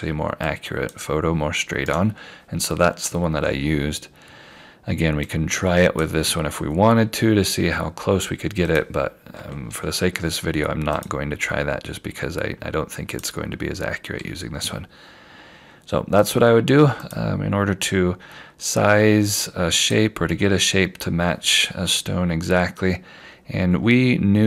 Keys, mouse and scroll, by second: 0.5 click, 1.8 right click, 5.3 click, 10.0 F4, 11.0 click, 16.3 click, 23.3 scroll up 1.